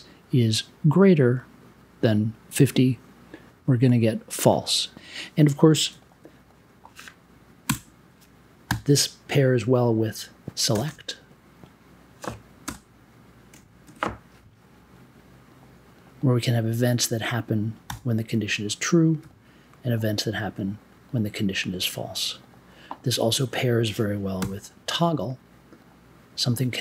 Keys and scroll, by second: 7.6 BackSpace, 8.6 n, 10.4 s, 10.7 BackSpace, 11.2 e, 12.6 space, 13.4 1, 13.7 space, 13.8 0, 17.8 b, 24.4 t.